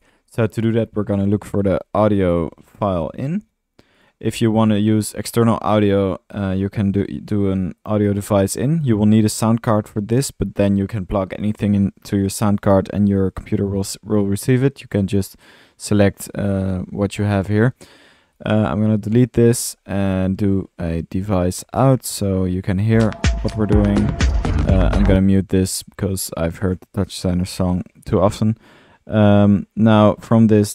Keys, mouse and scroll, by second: 0.0-3.4 typing, 0.2 click, 4.0 click, 4.2 click, 4.4 drag, 4.8-7.7 middle drag, 5.9 Tab, 8.5 click, 8.6 click, 15.0-15.5 drag, 17.8 drag, 18.9 Delete, 19.4 drag, 20.8 Tab, 20.8-21.8 typing, 26.9-27.6 right drag, 27.6 drag, 28.0 drag, 30.6 Tab.